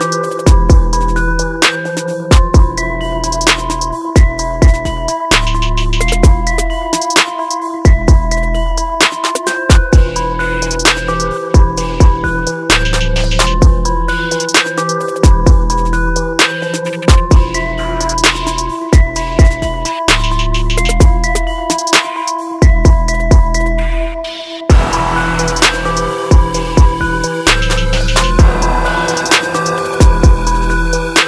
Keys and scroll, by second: 4.1 ctrl+-, 4.9 ctrl+t, 18.7 ctrl+j, 19.4 ctrl+t, 27.7 ctrl+=.